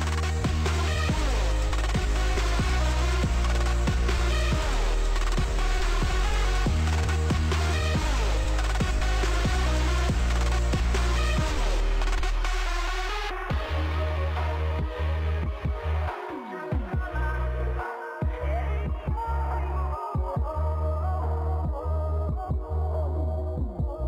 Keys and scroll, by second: 13.9 ctrl+s, 21.4 ctrl+space.